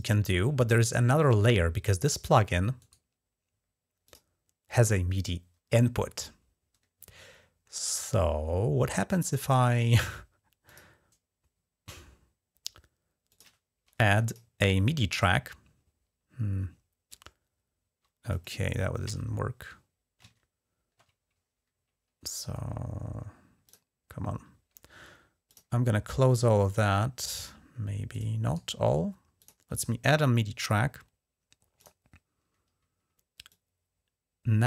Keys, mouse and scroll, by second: 2.6 right click, 3.8 click, 10.4 click, 13.1 click, 14.1 click, 17.1-18.1 middle drag, 18.9 alt+Tab, 23.4 click, 25.3 click, 27.9 click, 28.3 right click, 29.2 click, 31.6 click, 33.3-34.6 drag.